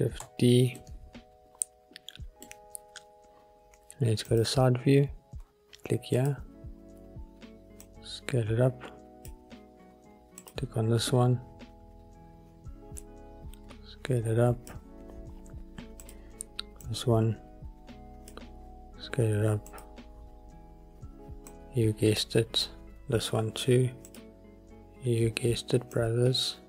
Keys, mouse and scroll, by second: 0.7 shift+d, 0.9 middle click, 2.4 click, 4.4 click, 6.3 click, 7.9 click, 10.5 click, 13.2 click, 16.2 click, 17.0 click, 19.8 click, 21.6 click, 24.2 click, 26.1 click.